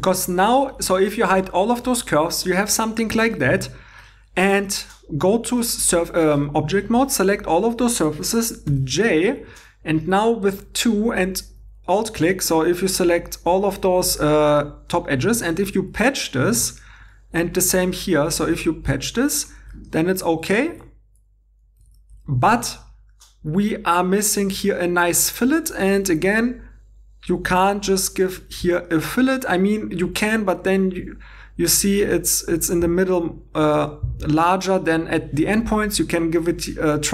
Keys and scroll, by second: 8.7 i, 10.2-10.9 typing, 15.5 shift+3, 18.2 shift+3, 20.7 alt+Tab, 21.8 alt+Tab, 25.5 Tab, 25.7 2, 28.5 shift+e.